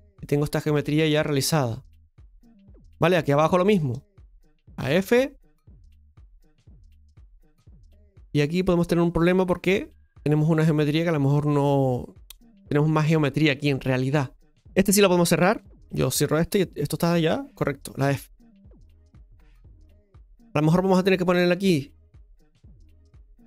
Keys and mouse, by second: 3.4 right click, 3.9 shift+right click, 4.8 f, 6.2-7.9 shift+middle drag, 15.2 right click, 16.1 shift+right click, 16.8 shift+right click, 18.0 f.